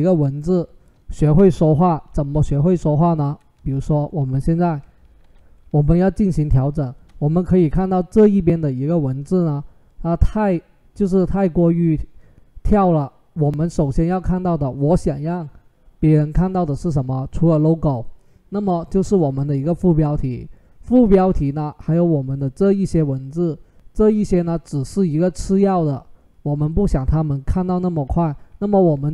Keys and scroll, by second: 2.1 ctrl+g, 3.4 ctrl+z, 5.0 ctrl+h.